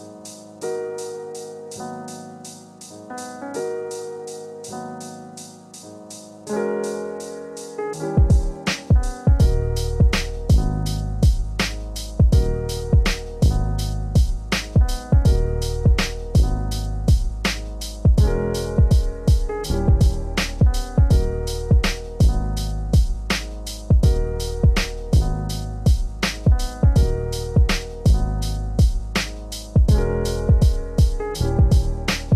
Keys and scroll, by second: 3.2 ctrl+z.